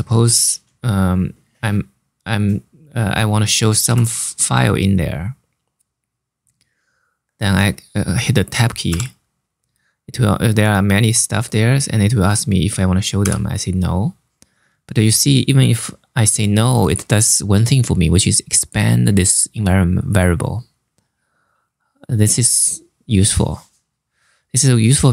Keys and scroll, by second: 3.5 /, 8.6 Tab, 12.9 n.